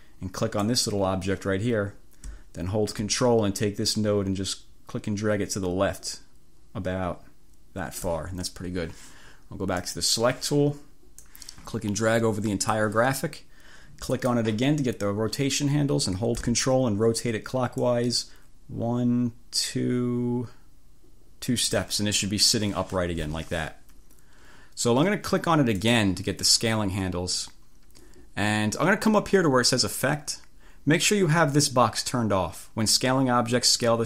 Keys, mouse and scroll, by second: 0.7 click, 4.0-8.3 ctrl+drag, 9.9 click, 11.3-13.0 drag, 14.1 click, 17.9-21.9 ctrl+drag, 25.8 click.